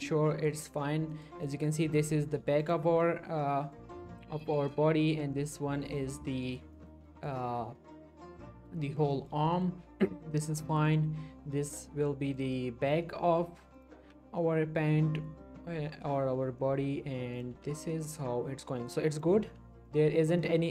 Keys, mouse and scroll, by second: 0.0 middle click, 0.3 scroll down 1, 1.1 middle click, 2.6 click, 2.9 l, 3.4-4.0 middle click, 3.7 scroll up 1, 4.4 middle click, 6.0 scroll up 1, 6.7 shift+middle click, 6.8 shift+scroll up 2, 7.0 middle click, 8.4 scroll up 1, 8.8 middle click, 9.1 shift+middle click, 11.0 click, 11.8 l, 12.0 scroll down 1, 12.1 middle click, 13.7 click, 14.0 l, 14.4-15.0 middle click, 17.3 click, 17.5 l, 17.9-18.8 middle click, 19.4 l, 19.9 middle click, 20.0-20.4 scroll up 1, 20.4 middle click.